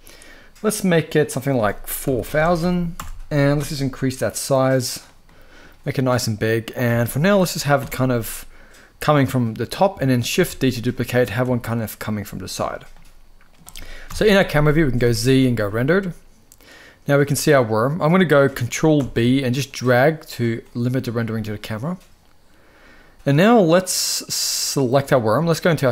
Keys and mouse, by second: 0.4 click, 1.0-2.6 drag, 2.0 0, 3.7 click, 4.9-5.3 middle drag, 5.7-6.3 middle drag, 6.5 g, 7.4-9.2 middle drag, 10.0 shift+d, 10.8 click, 11.1 r, 12.1 click, 12.6-13.2 middle drag, 13.7 KP_0, 14.7 z, 18.6 ctrl+b, 24.5 click.